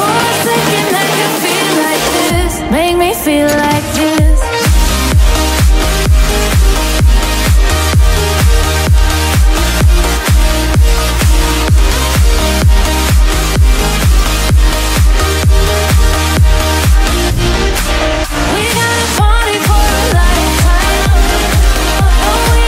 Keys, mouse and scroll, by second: 11.8 click, 13.6 click, 17.4 click, 21.8 click.